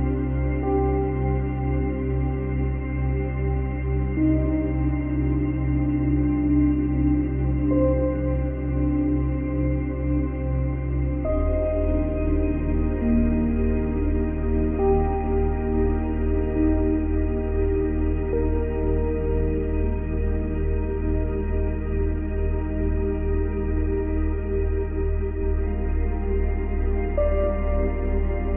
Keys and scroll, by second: 1.8 space, 4.9 space, 8.7 space, 9.6 space, 12.3 space, 14.5 space, 15.9 space, 18.5 space, 19.7 space, 21.5 space, 23.1 space, 23.8 F9.